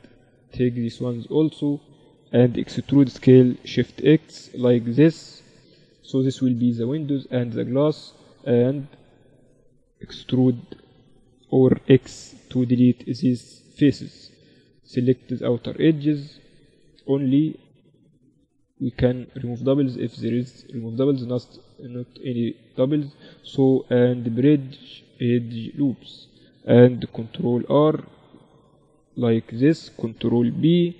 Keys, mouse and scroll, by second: 1.7-3.6 right drag, 3.2 e, 8.3-12.1 middle drag, 12.1 x, 15.5-17.4 drag, 16.2 a, 16.4 a, 16.8-19.2 right drag, 18.2 a, 18.7 a, 19.2 w, 21.2 a, 21.7-24.6 right drag, 23.8 w, 27.5 ctrl+r, 30.8 ctrl+b.